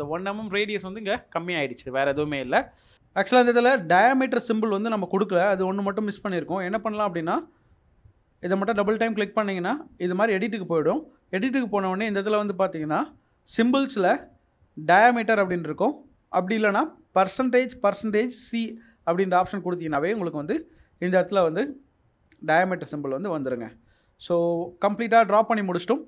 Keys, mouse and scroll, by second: 1.7-2.4 scroll down 1, 2.8 middle click, 23.6 Escape.